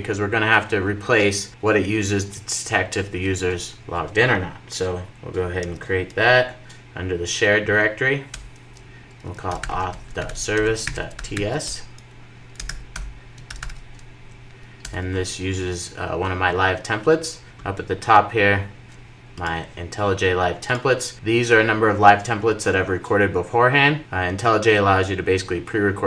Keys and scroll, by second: 5.7 super+n, 14.8 Return.